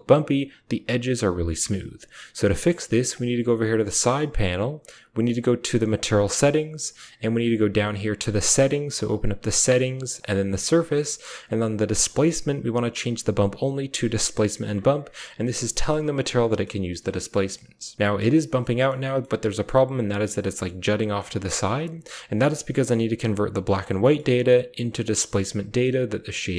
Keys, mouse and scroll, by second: 2.9 middle click, 6.7 middle click, 6.7-7.2 scroll down 1, 12.0-13.9 drag, 15.3-15.7 drag, 16.3 click, 17.2 click, 18.4 middle drag, 18.8 middle drag, 19.2 middle drag, 20.2-21.0 middle drag, 21.3 middle click, 23.8 click, 25.6 click.